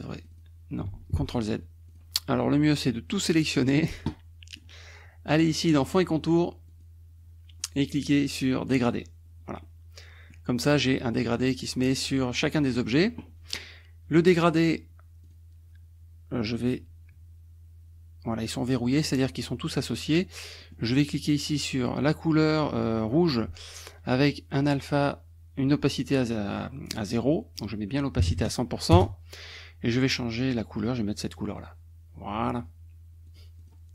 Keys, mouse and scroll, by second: 0.2 click, 1.0 ctrl+z, 1.9 click, 2.4 click, 3.6 middle click, 4.1 click, 4.2 scroll up 1, 5.8 click, 6.7 click, 8.9 click, 9.6 click, 15.3 click, 20.6 middle click, 22.2 click, 27.3 click, 28.2 KP_1, 28.4 KP_0, 29.0 Return, 31.6 click, 33.3 click, 33.8 click.